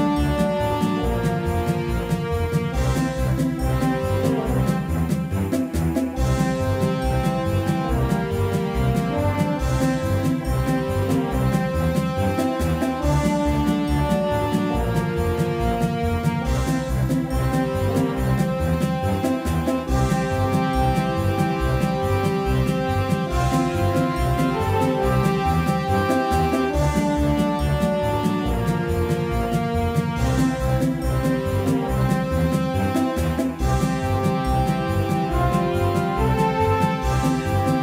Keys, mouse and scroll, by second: 5.9-15.2 right drag, 13.4-15.0 drag, 15.0-18.0 middle drag, 18.3-20.6 drag, 19.4 ctrl+z, 20.4 middle click, 22.2-24.6 middle drag, 25.4 KP_5, 25.9 KP_1, 26.7 KP_3, 28.2 Tab, 32.6-36.6 middle drag.